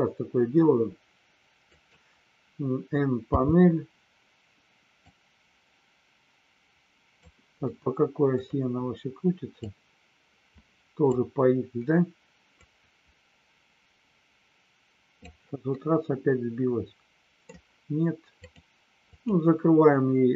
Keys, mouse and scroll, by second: 1.7 click, 5.1-7.2 drag, 7.6 middle click, 9.6-11.1 drag, 12.6-15.2 drag, 15.6-17.5 middle drag.